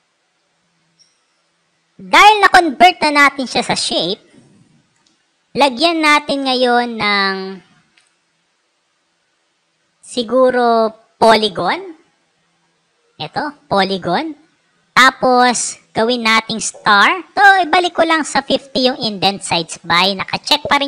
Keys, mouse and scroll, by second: 1.5 click, 4.0 right click, 11.9 click, 14.7 click, 17.1 click.